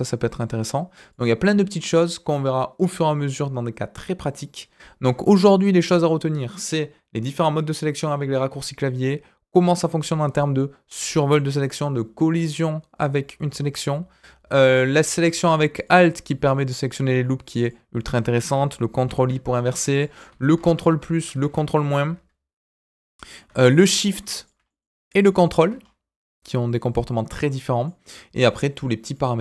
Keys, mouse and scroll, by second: 5.0 scroll down 1, 5.3 middle click, 14.8 click, 15.7 alt+click, 16.5 alt+click, 17.5 alt+click, 18.9 ctrl+i, 19.9 click, 20.5 ctrl+KP_Add, 20.7 ctrl+KP_Add, 21.1 ctrl+KP_Subtract, 21.3 ctrl+KP_Subtract, 22.5-22.8 scroll down 2, 22.8 middle click, 23.6 shift+click, 23.9 shift+click, 24.3 shift+click, 24.6 scroll up 1, 24.6 middle click, 25.0 click, 25.4 ctrl+click, 25.7-27.8 scroll up 2, 27.8 middle click, 29.0-29.4 drag.